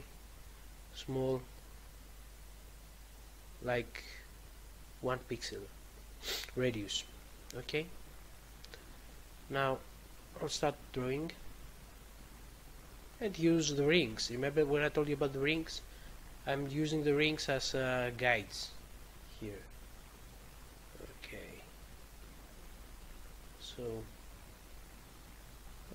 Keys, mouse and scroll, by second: 10.1 click, 10.5 click, 10.9 click, 11.3 click, 11.5 click, 11.7 click, 12.1 click, 12.6 click, 13.1 click, 13.7 click, 14.0 click, 14.5 click, 15.0 click, 15.5 click, 16.0 click, 16.4 click, 17.0 click, 17.5 click, 18.0 click, 18.4 click, 18.8 click, 19.3 click, 19.9 click, 20.3 click, 20.7 click, 20.9 click, 21.0 click, 22.1 double click, 22.2 double click, 22.5 double click, 22.9 click, 23.3 click, 23.7 click, 24.2 click, 24.7 click, 25.2 click, 25.6 click, 25.8 click.